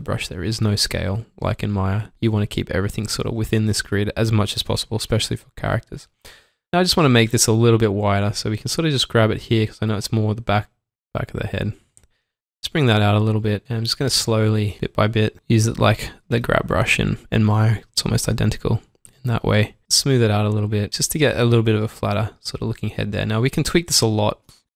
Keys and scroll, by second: 0.2 typing, 2.1 s, 4.7 shift+Num_Lock, 4.7 typing, 6.6 typing, 12.2 shift+Num_Lock, 12.2 typing, 13.8-14.7 typing, 16.3 typing, 19.8 typing, 21.7 s.